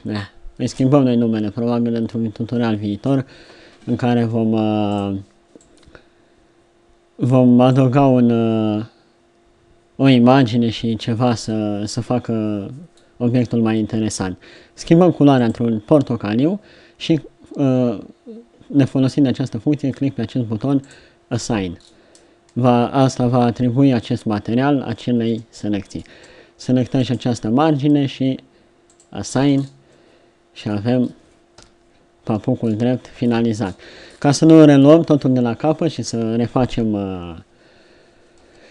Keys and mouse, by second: 13.3-15.4 middle drag, 21.3-25.2 middle drag, 25.2 Tab, 26.1 Tab, 29.4 Tab, 32.6 KP_7, 36.8 Tab, 37.3 Tab, 38.4 Tab.